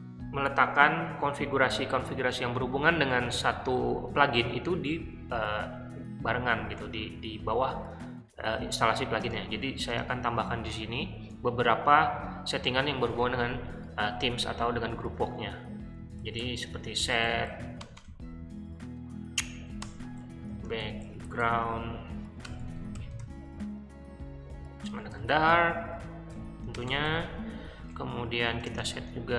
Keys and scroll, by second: 9.2 space, 9.8 space, 15.7-17.9 typing, 19.7-27.2 typing, 27.7 Return, 28.3-29.3 typing.